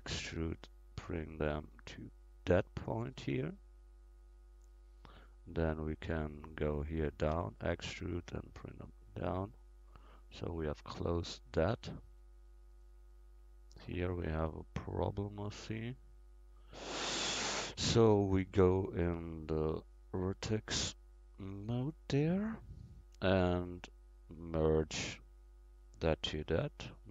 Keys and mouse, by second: 0.7-2.9 drag, 5.6 right click, 7.4 e, 8.4-10.1 drag, 11.0 middle click, 12.2-18.7 middle drag, 19.9-22.1 middle drag, 22.1-23.9 drag, 23.9-27.1 right drag.